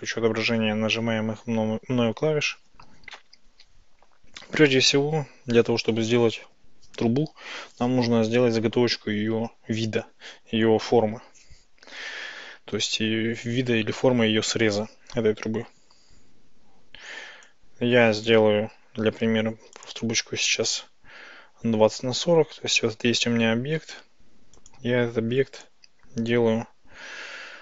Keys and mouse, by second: 0.0 click, 17.1 Tab, 17.5-18.7 drag, 19.2 x, 21.9 Tab, 24.6 click, 25.7-27.6 drag.